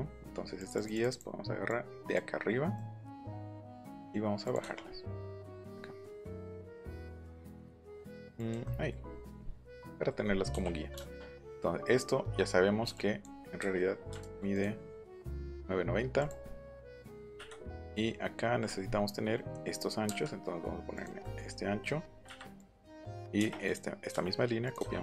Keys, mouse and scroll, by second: 0.5 click, 0.7 click, 0.9 click, 1.0 click, 1.6 click, 3.7 middle click, 4.4 click, 8.4 click, 8.6-9.6 middle drag, 9.9 middle click, 10.2 middle click, 12.8 e, 12.9 click, 14.2 ctrl+z, 14.5 click, 16.1 click, 16.4 middle click, 17.4 click, 17.8 click, 20.0 Right, 20.9 click, 21.2 middle click, 21.6-22.1 scroll up 4, 22.6-23.6 drag.